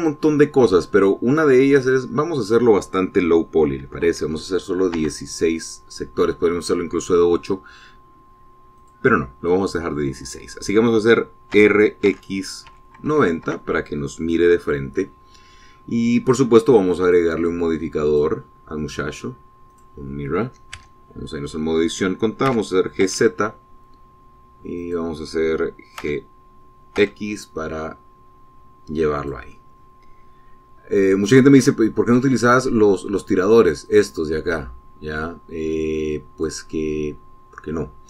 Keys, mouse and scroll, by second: 2.5 click, 4.5 KP_1, 4.8 KP_6, 5.7 KP_Enter, 9.5 click, 12.3 r, 12.8 x, 13.4 KP_9, 13.8 KP_0, 14.2 KP_Enter, 17.8 click, 18.8 click, 20.4 click, 21.6 Tab, 23.2 g, 23.8 z, 25.5 click, 26.7 g, 27.7 x, 29.9 click, 34.6-37.4 drag.